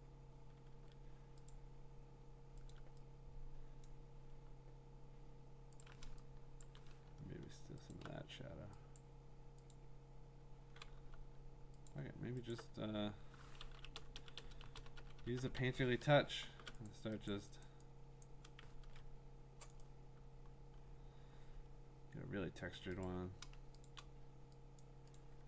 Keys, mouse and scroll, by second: 0.0 click, 0.7 ctrl+z, 1.5 click, 2.7 alt+click, 3.9 click, 5.8 alt+click, 6.6 click, 6.6 click, 6.8 click, 6.8 alt+click, 7.9 alt+click, 9.0 click, 9.8 click, 9.9 alt+click, 11.0 b, 11.9 alt+click, 12.5 alt+click, 13.7-16.5 typing, 16.9 click, 17.3 click, 17.6 click, 18.2 click, 18.8 ctrl+z, 19.8 right click, 20.5-21.7 scroll, 23.1 click, 23.9 click, 24.9 click, 25.2 click.